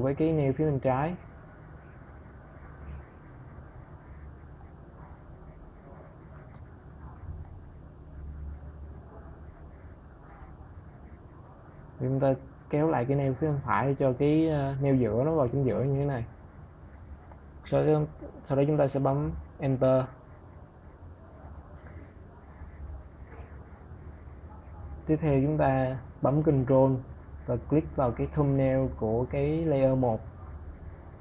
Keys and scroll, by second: 18.6 Return.